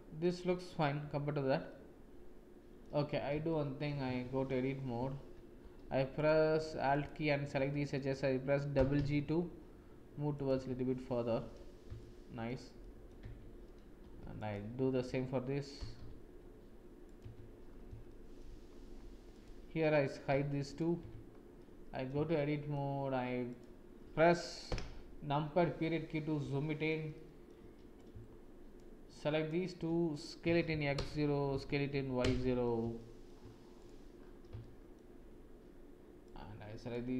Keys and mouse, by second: 1.7-2.8 drag, 3.4 shift+click, 4.0 Tab, 5.5 space, 6.9 alt+click, 8.7 g, 10.6 Tab, 11.9 shift+click, 12.1 shift+middle click, 12.4 shift+click, 12.8 shift+click, 13.2 Tab, 14.4 alt+click, 15.7 g, 17.3 Tab, 18.0 shift+click, 19.3 click, 20.3 h, 20.7 click, 21.0 Tab, 21.5 click, 22.3 shift+click, 24.6 KP_Decimal, 26.5 shift+click, 27.1 click, 28.0 shift+click, 29.2 shift+click, 30.4 s, 32.9 shift+click, 33.8 click, 34.6 shift+middle click, 36.2 click.